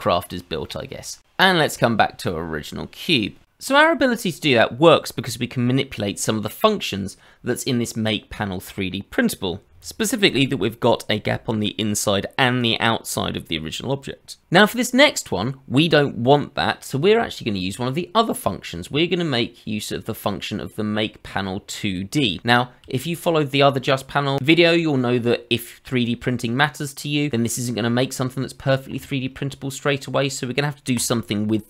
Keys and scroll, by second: 0.1 ctrl+z, 0.2 ctrl+z.